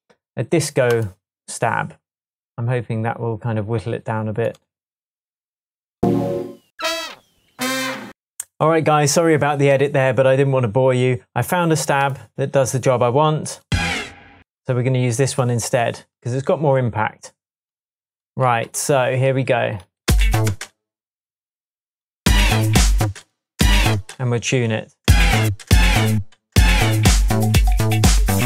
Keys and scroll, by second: 6.5 Down, 7.6 Down, 8.0 Right, 8.5 Up, 20.0 space, 22.2 space, 23.0 space, 23.5 space, 25.4-26.1 space, 28.3 Tab.